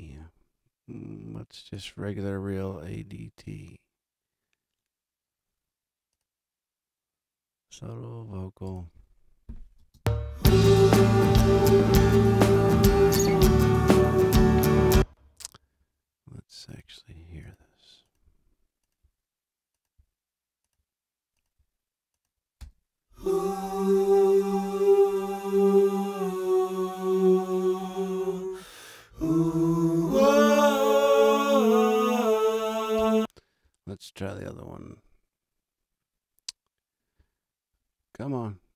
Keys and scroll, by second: 9.7 space, 14.7 space, 22.5 space, 32.9 space.